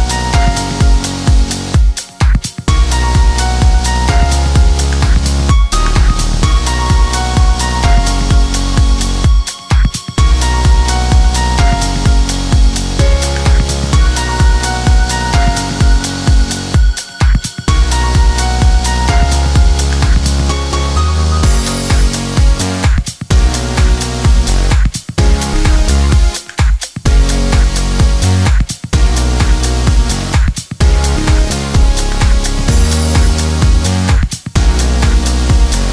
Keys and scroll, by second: 1.0 ], 2.4 [.